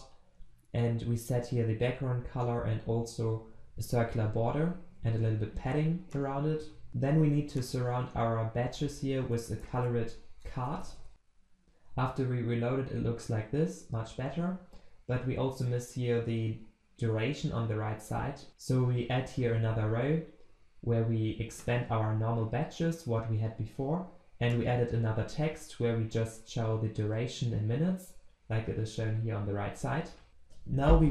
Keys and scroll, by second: 7.2 ctrl+c, 10.1 ctrl+v, 11.1 ctrl+s, 18.5 ctrl+s.